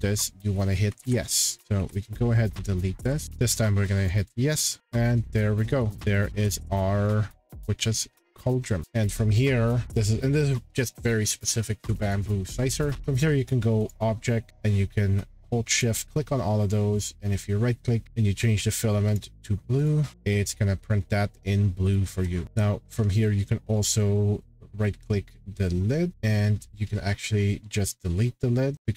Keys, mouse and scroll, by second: 0.3 middle click, 0.5 scroll, 0.9 ctrl+z, 1.6 click, 1.8 Delete, 2.5 middle click, 3.1 shift+click, 3.2 click, 4.8-5.2 scroll, 5.7-6.1 scroll down 11, 6.1 click, 7.0 click, 7.2 scroll, 8.0 scroll, 8.6 scroll, 9.1 scroll down 10, 10.3 middle click, 10.6 scroll, 12.1 click, 13.8 click, 14.5 scroll down 4, 15.8 shift+click, 16.2 scroll, 17.1 right click, 19.1 click, 19.2 right click, 19.8 click, 19.9 shift+click, 21.9 click, 22.1-23.0 scroll, 22.4 click, 23.2 scroll down 7, 23.8 click, 24.5 right click, 24.8 scroll, 28.7-28.9 drag.